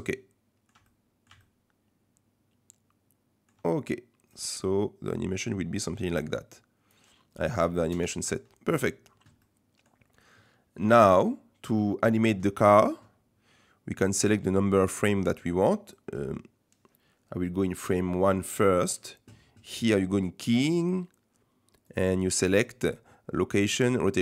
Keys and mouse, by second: 1.0 click, 1.4-3.5 shift+drag, 4.3-7.0 drag, 7.9 KP_0, 9.4-9.9 middle drag, 18.0 click, 20.4-24.2 drag.